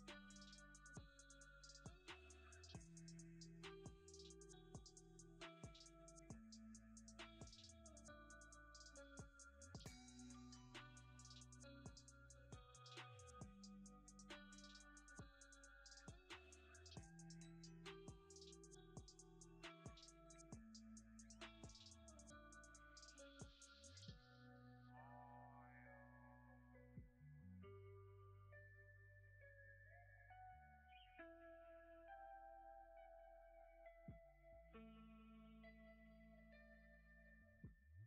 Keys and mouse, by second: 0.8 g, 1.3 click, 3.5 g, 3.9 click, 4.3 g, 4.9 click, 6.3 alt+click, 7.9 shift+a, 10.6-12.3 typing, 10.9 drag, 11.4 click, 11.8 shift+click, 14.1 drag, 14.3 g, 15.1-15.5 middle drag, 15.9 shift+middle click, 16.0 middle click, 17.6 middle click, 22.3 shift+middle click, 22.4 click, 23.0 shift+middle click, 23.8 shift+click, 24.1 right click, 26.2-28.1 right drag, 28.1 click, 28.1 o, 36.1 right click.